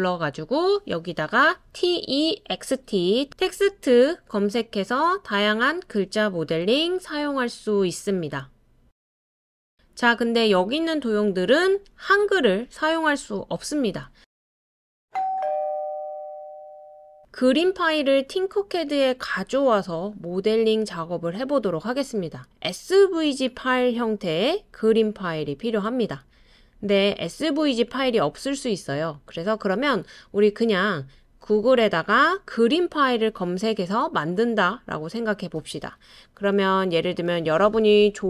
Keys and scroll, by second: 1.8-3.8 typing.